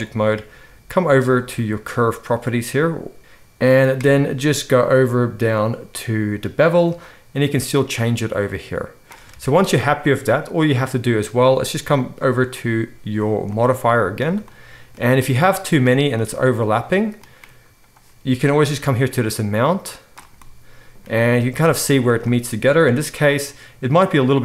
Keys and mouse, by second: 2.0 click, 2.2-7.0 middle drag, 7.0-10.7 shift+drag, 9.3 alt+a, 10.7-12.0 middle drag, 12.0 click, 12.2-18.8 middle drag, 18.8-24.4 shift+drag.